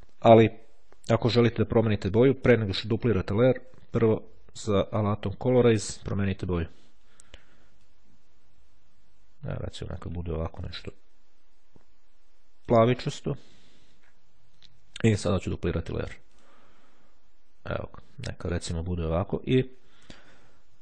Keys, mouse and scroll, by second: 2.8 click, 3.6 click, 5.8 click, 6.7 click, 7.9-10.5 drag, 10.7-13.3 drag, 13.6 click, 15.9 click.